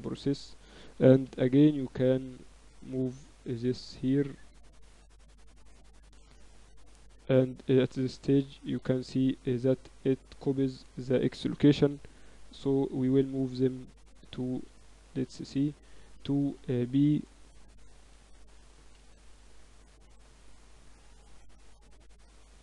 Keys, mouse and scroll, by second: 0.1 a, 0.8 a, 1.2 b, 2.3-3.5 drag, 3.8 a, 4.4 Tab, 6.4-8.4 middle drag, 8.4-10.2 drag, 8.4 right click, 9.4 Tab, 10.5 a, 10.7 a, 11.8 b, 13.8 middle click, 14.5 a, 15.0 Tab, 15.5 Tab, 16.3-18.8 typing, 20.2-22.4 drag, 21.8 Tab.